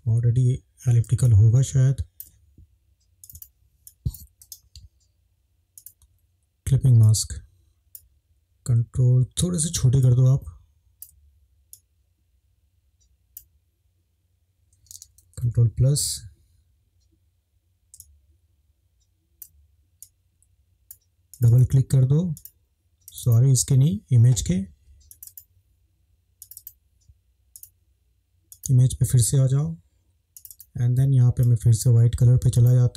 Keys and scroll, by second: 15.4 ctrl+=, 15.6 ctrl+=.